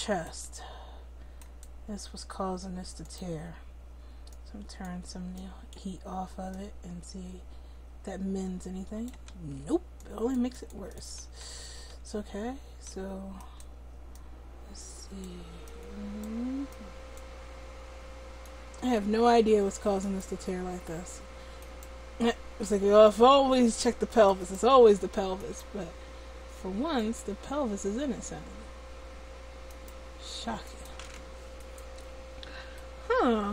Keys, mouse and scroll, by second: 3.0-9.4 middle drag, 9.4 ctrl+z, 11.2 ctrl+z, 11.5 ctrl+z, 12.0 ctrl+z, 12.5 ctrl+z, 17.7 middle click, 19.2-21.6 middle drag, 21.6-25.8 right drag, 25.8-33.5 middle drag, 26.0-29.7 right drag, 28.4-29.7 drag, 32.7 right click, 33.1 click.